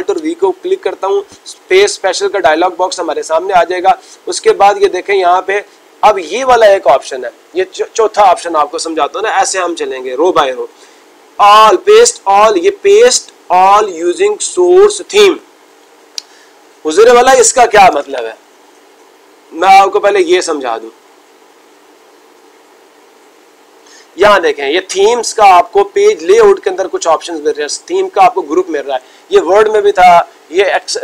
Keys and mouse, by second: 3.3-4.5 drag, 20.7-21.9 drag, 22.2-23.3 drag.